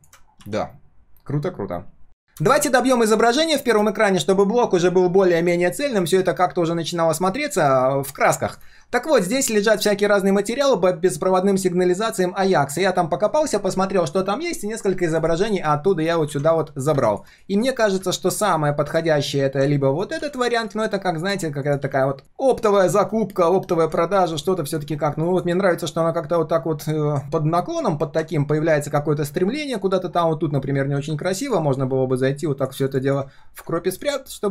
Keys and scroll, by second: 0.4 ctrl+s, 0.7 ctrl+shift+4, 16.2 ctrl+v, 20.2 ctrl+c, 21.8 ctrl+v.